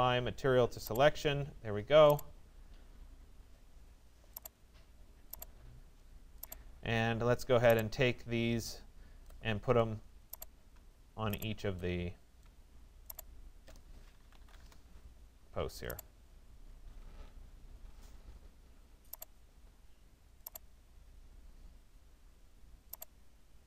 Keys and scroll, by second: 14.2 Return.